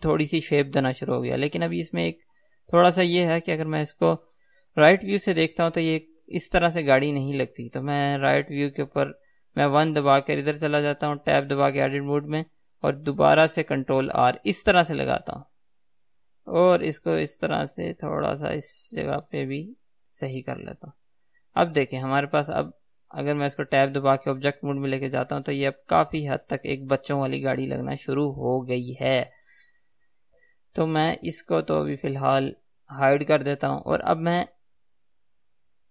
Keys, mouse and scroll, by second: 8.7 KP_3, 10.1 KP_1, 11.7 Tab, 14.2 ctrl+r, 24.6 Tab, 30.4 ctrl+z, 33.3 click.